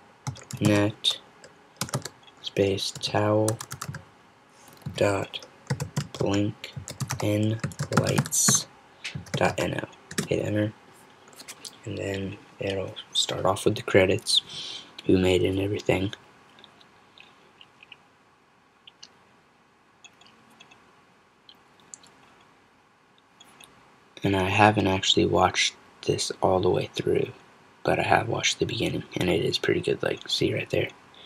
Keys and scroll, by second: 0.0-2.0 typing, 3.0-10.0 typing.